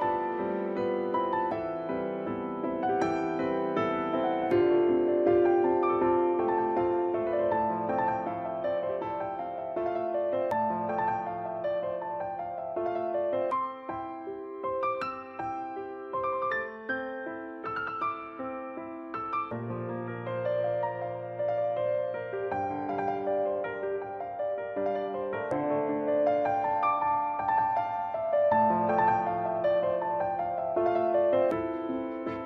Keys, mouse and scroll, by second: 0.7 shift+right click, 7.4 click, 10.4 click, 15.2 click, 20.8 a, 24.8 click, 26.3 a, 28.1 right click, 32.1 click.